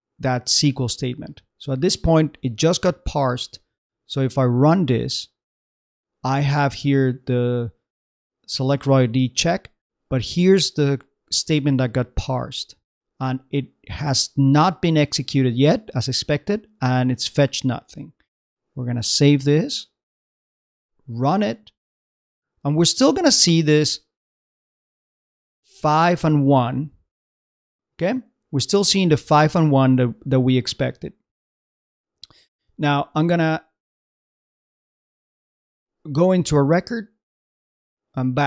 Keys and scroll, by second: 2.7 super+Tab, 17.8 super+Tab, 23.3 super+Tab, 32.7 super+Tab.